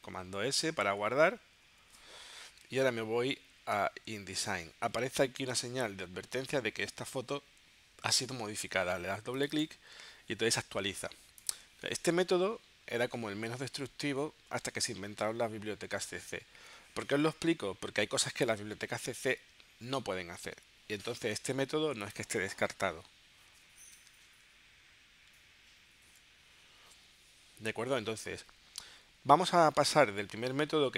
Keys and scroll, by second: 0.4 super+s, 1.9 super+w, 2.7 super+Tab, 26.0 shift+super+p.